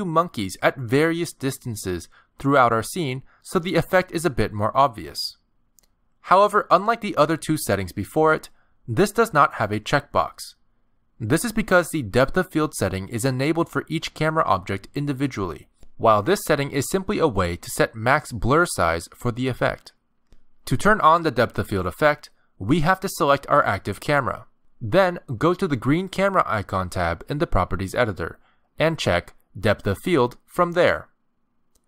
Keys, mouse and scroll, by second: 0.0-3.5 typing, 1.2 middle click, 1.4 scroll down 2, 1.5 shift+middle click, 1.5 scroll up 1, 1.7 middle click, 2.3 middle click, 3.0 middle click, 3.4 click, 3.5 middle click, 4.2 middle click, 4.7 middle click, 5.1-7.9 typing, 5.3 middle click, 5.7 middle click, 6.4 ctrl+z, 6.4 scroll up 2, 6.5 shift+middle click, 6.6 middle click, 7.2 middle click, 17.7 click, 19.0 click, 20.0 KP_0, 23.0 click, 27.9 click, 30.4 click.